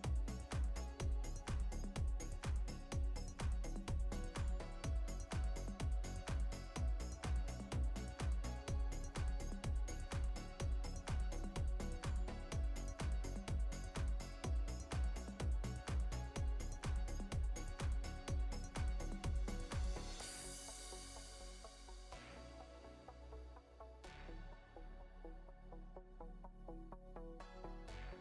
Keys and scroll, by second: 1.1 space, 4.4 space, 7.8 space, 9.5 space, 10.5 space, 11.2 space, 11.8 space, 12.7 space, 13.6 ctrl+z, 15.7 ctrl+x, 16.9 space, 17.9 space, 19.9 ctrl+z, 20.6 ctrl+z, 21.0 ctrl+z.